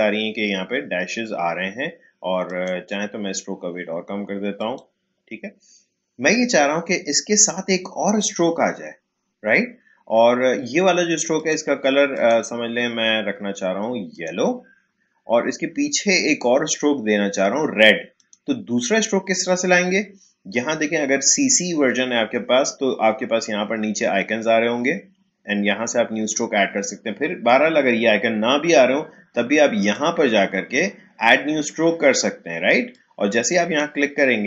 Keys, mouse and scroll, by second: 2.4 click, 14.2 click, 18.1 click, 29.8 click, 32.9-34.4 drag.